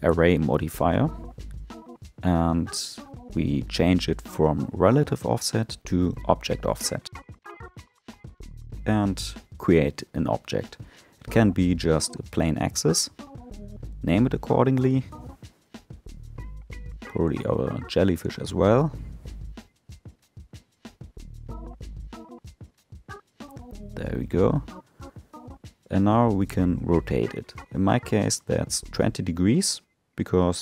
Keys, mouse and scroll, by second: 1.5-3.5 drag, 5.2 click, 7.2 shift+a, 11.0 click, 11.2-14.4 drag, 18.0 click, 18.2-20.3 drag, 20.3 l, 24.8 click, 26.3 r.